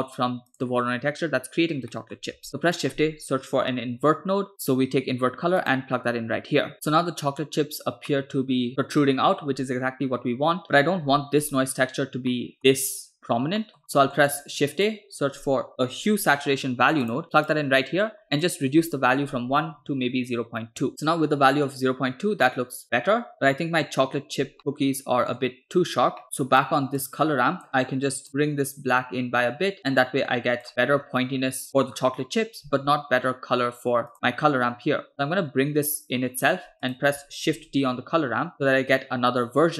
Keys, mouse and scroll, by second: 0.0 scroll up 2, 0.6 click, 2.0 middle click, 2.5 shift+a, 8.2-9.6 middle drag, 10.6 middle click, 11.1 scroll up 2, 11.5 click, 12.5 middle click, 13.6 middle click, 13.8 scroll up 1, 14.0 middle click, 14.4 shift+a, 18.6-20.9 drag, 22.7-23.3 middle drag, 24.4 scroll down 2, 24.6 middle click, 26.2-26.7 drag, 26.2 middle click, 27.1-28.3 drag, 27.8-28.2 scroll up 3, 28.7-30.6 drag, 30.7 middle click, 30.9-31.5 scroll up 2, 31.5-31.9 scroll down 3, 31.7 middle click, 32.1-32.5 scroll up 2, 33.7 scroll down 1, 34.2 click, 35.1-36.7 drag, 37.0 click, 37.6 shift+d.